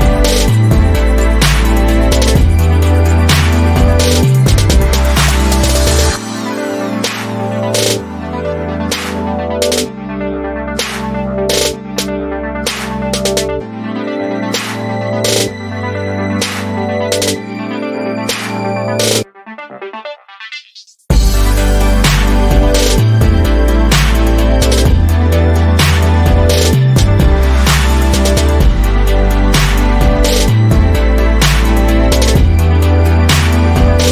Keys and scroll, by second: 5.2 ctrl+g, 9.8 Right, 10.2 Right, 10.5 Down, 11.4 Up, 12.1 Right, 12.4 Up, 24.1-24.8 typing, 24.9 Return.